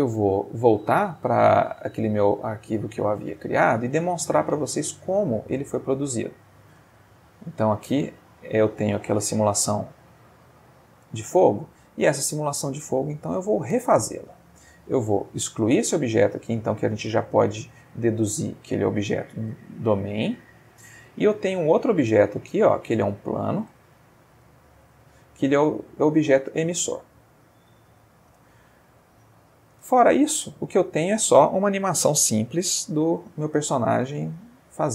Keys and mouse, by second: 2.5 click, 6.3 click, 7.9 space, 11.1 Escape, 11.6-12.8 middle drag, 13.1-13.7 ctrl+middle drag, 14.4 click, 16.3-19.5 middle drag, 19.5 x, 20.2 click, 21.2 click, 21.7-23.8 shift+middle drag, 23.9-26.1 ctrl+shift+middle drag, 27.2 x, 27.7 ctrl+click, 28.2-29.7 ctrl+middle drag, 29.7 ctrl+space, 33.2-34.2 middle drag, 34.3 middle click.